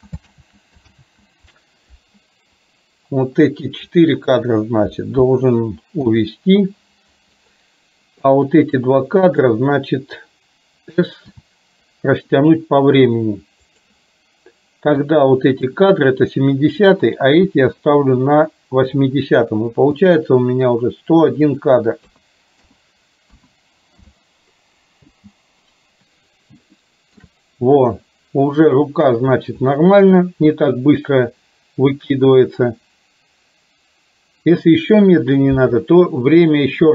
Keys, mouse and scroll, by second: 0.8 ctrl+z, 0.9 ctrl+z, 2.6-3.6 drag, 8.3-8.8 drag, 9.4 click, 15.1 click, 15.3 click, 20.1 click, 21.6-24.1 drag, 25.1 space, 26.9 shift+middle drag.